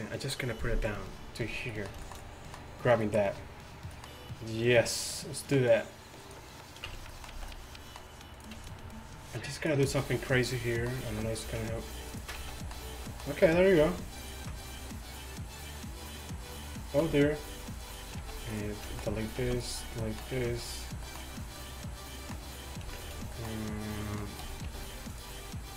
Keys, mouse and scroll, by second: 5.4-6.9 middle drag, 6.9 Tab, 7.4 z, 8.7-9.9 drag, 8.7-9.9 middle drag, 8.7-9.9 right drag, 11.2 g, 13.5 r, 14.2 z, 17.1 z, 18.3 x, 19.5 x, 20.4 z, 23.0 shift+Tab, 23.8 click, 24.8 click, 24.8 g.